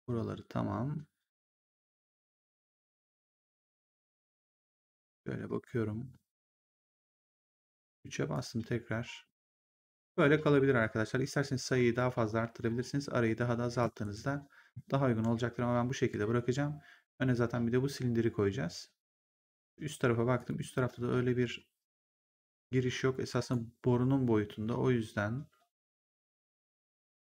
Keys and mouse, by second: 7.4 3, 8.2 click, 13.9 ctrl+1, 20.3 click, 20.8 1, 23.3 click, 24.4 r.